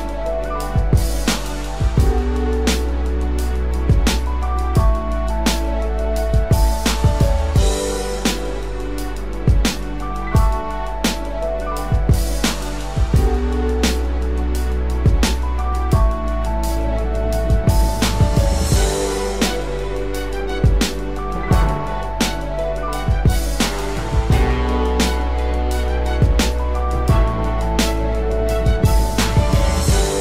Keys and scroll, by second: 25.3 ctrl+=, 26.5 ctrl+space.